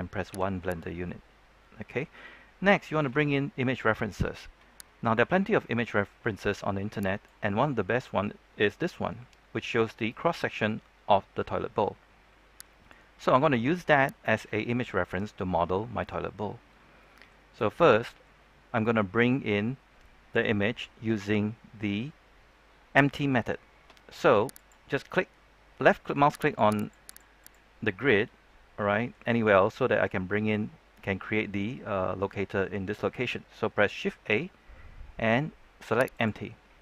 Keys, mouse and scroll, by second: 11.9 middle click, 20.7 click, 24.6-26.6 middle drag, 33.5 click, 33.5 shift+a, 34.3 middle click, 35.1 scroll up 1, 35.3 middle click.